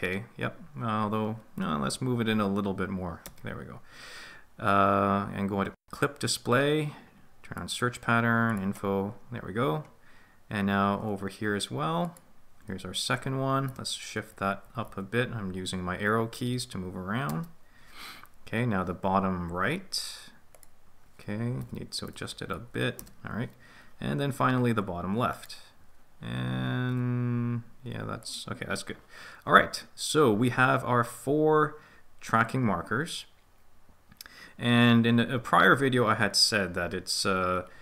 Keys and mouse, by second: 1.8 g, 2.1 Left, 3.2 Return, 5.7-9.0 drag, 12.0 ctrl+click, 13.6 g, 14.2 Up, 14.6 Up, 14.8 Up, 16.2 Left, 16.4 Right, 17.2 Return, 20.5 ctrl+click, 21.6 g, 22.1 Left, 22.4 Up, 22.7 Right, 23.6 Return, 25.3 ctrl+click, 26.9 g, 28.2 click.